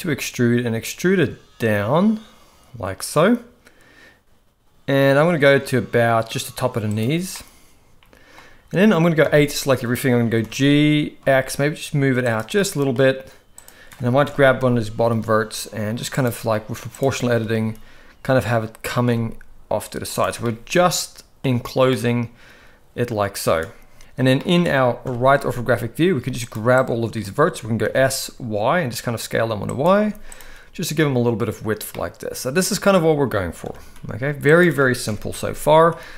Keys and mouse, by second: 7.3-8.4 middle drag, 9.2 a, 10.4 g, 12.6 middle click, 14.3 KP_1, 15.0 g, 17.5 g, 20.4-21.4 middle drag, 21.9-23.5 middle drag, 24.4 middle click, 25.1 KP_3, 26.1 z, 26.8 click, 27.8 s, 30.0 z, 31.9-33.3 middle drag, 33.6 s, 35.1 KP_1.